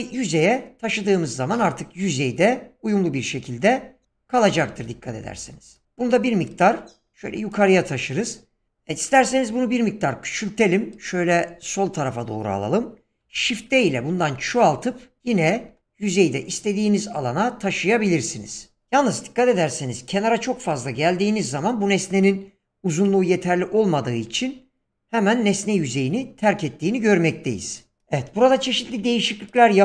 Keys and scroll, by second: 5.8 ctrl+z, 9.2 s, 13.2 shift+d.